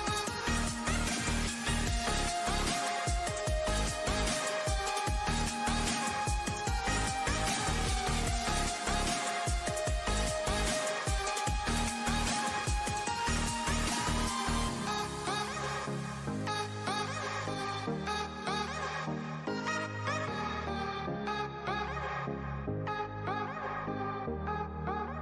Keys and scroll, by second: 13.0 super+d.